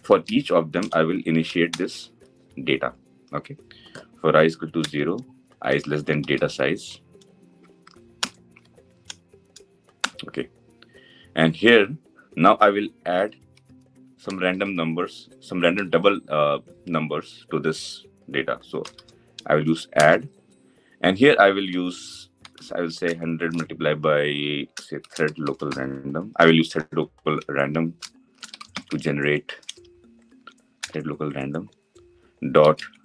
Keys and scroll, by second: 1.6 Return, 7.9 Return, 19.7 Return, 30.5 Return, 32.2 Return.